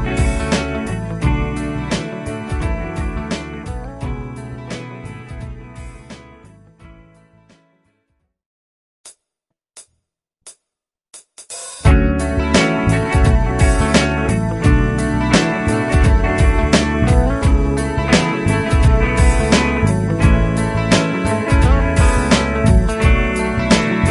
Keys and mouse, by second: 3.5 Delete, 20.3 ctrl+q, 21.4 Up, 21.7-22.9 Up.